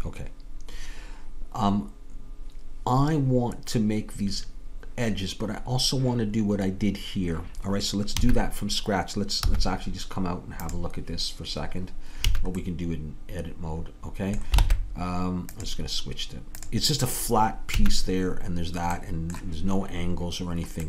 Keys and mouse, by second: 8.2 a, 9.5 z, 10.7-13.8 middle drag, 14.6 ctrl+Tab, 17.8-19.0 drag, 17.8 a, 19.0-20.8 middle drag.